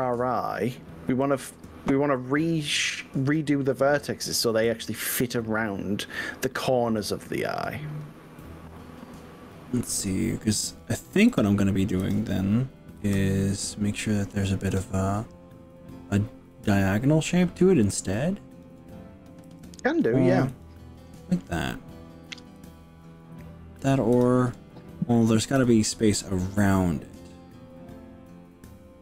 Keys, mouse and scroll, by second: 2.7 click, 3.5 click, 4.7 g, 11.5 click, 12.1 click, 13.0 g, 14.7 click, 18.7 click, 19.5 g, 20.7 click, 22.7 click, 24.3 click, 25.5 g.